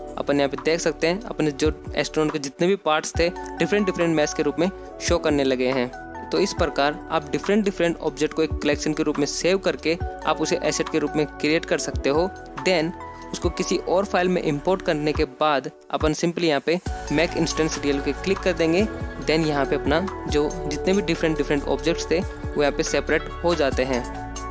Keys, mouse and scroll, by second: 0.6 click, 1.1 click, 1.4 click, 2.0 g, 2.9 click, 3.1 g, 4.3 click, 4.4 g, 6.3 click, 6.5 g, 7.2 middle click, 7.8 scroll up 2, 8.1 middle drag, 8.5 shift+middle click, 9.3 click, 9.5 click, 10.2 middle click, 10.4 scroll down 2, 11.1 ctrl+a, 12.6 click, 12.6 middle click, 12.9 ctrl+a, 16.8 click, 17.3 click, 17.7 ctrl+z, 18.3 ctrl+z, 19.1 scroll up 2, 19.4-20.4 middle drag, 20.6 ctrl+a, 23.9 click, 24.4 middle drag.